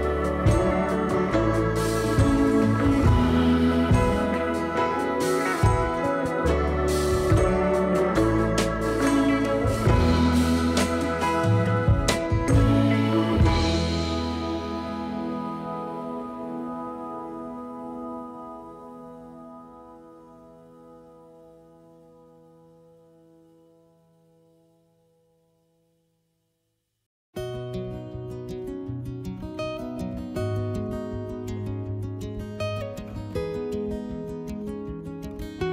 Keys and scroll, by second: 1.6 2, 2.5 s, 10.4 3, 17.5 s, 20.1 s, 26.7 s, 28.8 ctrl+z, 29.6 2.